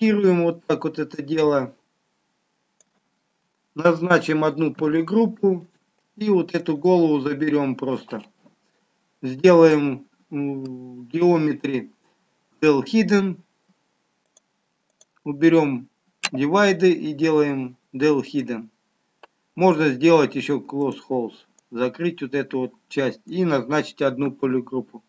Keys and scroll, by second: 5.0 ctrl+w, 24.5 ctrl+w.